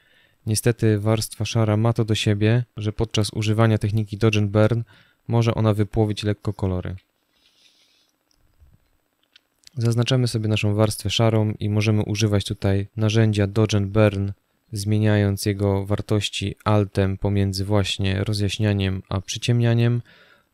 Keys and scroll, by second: 7.0 o.